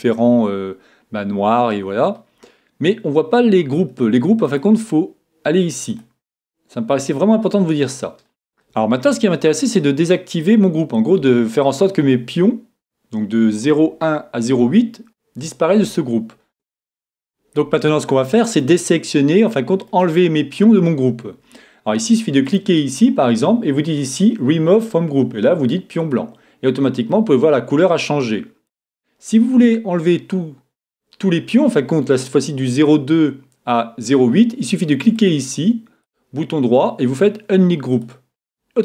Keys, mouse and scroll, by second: 0.4-2.3 middle drag, 4.5-6.3 drag, 7.8 middle click, 8.5 a, 16.5 a, 18.6-20.4 middle drag, 22.5-24.4 right drag, 24.7-26.6 drag, 27.1-28.9 middle drag, 35.1-37.1 drag, 36.0-37.9 right drag.